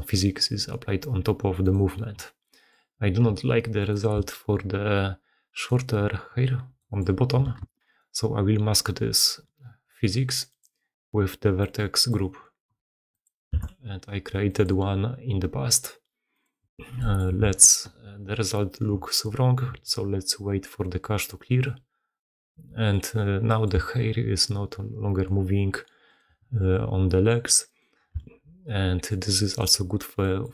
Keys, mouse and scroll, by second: 2.4 click, 4.1 g, 6.8 drag, 7.5 shift+space, 16.5 middle click, 17.4 shift+middle click, 17.6 shift+space, 17.7 shift+middle click, 18.3-18.6 middle drag, 23.6 middle click, 23.8 g, 27.6 click, 28.2 g, 30.2-30.5 drag.